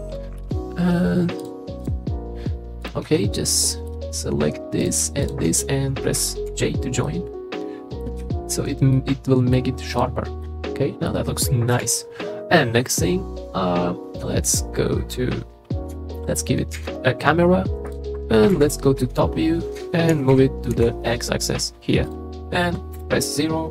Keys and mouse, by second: 3.1 Tab, 3.6 middle click, 6.5 j, 7.0 middle click, 8.2 Tab, 8.9-9.5 middle drag, 10.4-11.1 drag, 11.7 KP_3, 16.7 shift+a, 18.5 KP_7, 20.1 g, 20.3 y, 20.7 x, 22.9 KP_0.